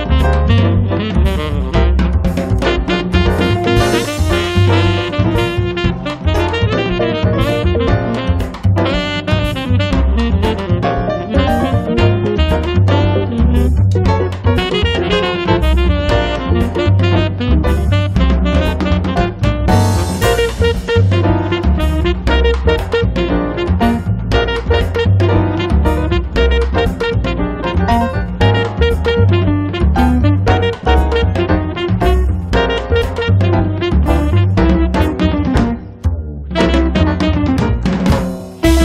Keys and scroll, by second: 21.9-22.8 typing, 27.7-28.7 typing, 33.4-34.4 typing, 35.9 6.